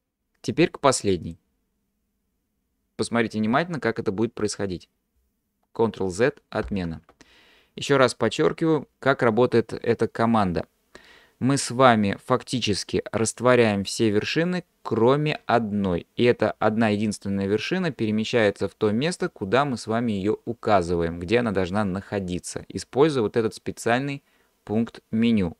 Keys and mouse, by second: 6.7 ctrl+z.